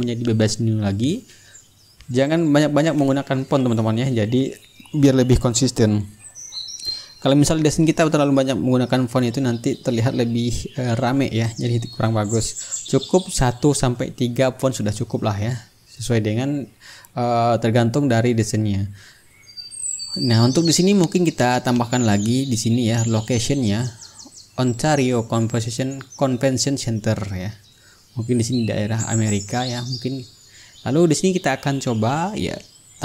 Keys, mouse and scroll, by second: 0.1-1.0 typing, 2.3 click, 3.4 click, 5.6 KP_2, 6.1 Return, 8.1 click, 10.2-13.1 drag, 12.1 t, 12.7 ctrl+a, 13.2 click, 13.9 KP_1, 14.2 KP_2, 14.4 KP_0, 14.6 Return, 15.9-18.5 drag, 19.4-21.3 ctrl+drag, 21.5 click, 24.3 click, 26.3 click, 28.0 click, 29.0-32.7 ctrl+middle drag.